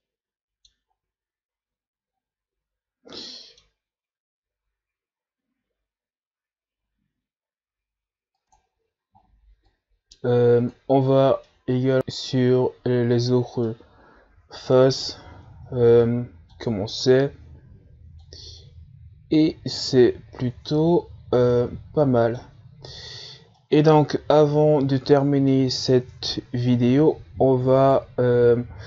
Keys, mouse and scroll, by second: 0.8-1.6 scroll up 3, 2.2-2.7 scroll down 4, 3.2-11.1 middle drag, 11.1-11.4 scroll down 3, 11.4-16.9 middle drag, 16.9-17.3 scroll down 1, 17.3-22.4 middle drag, 22.4-22.8 scroll down 2, 22.8-24.0 middle drag, 24.0-25.6 scroll up 4, 25.6-27.0 scroll up 1, 27.0-28.8 middle drag.